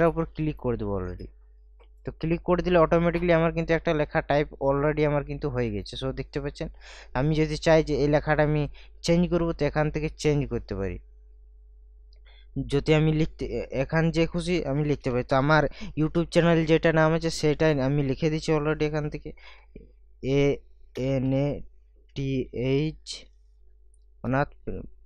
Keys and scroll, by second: 19.6 shift+a, 21.0 n, 21.2 a, 22.2 t, 23.2 h, 24.1 space.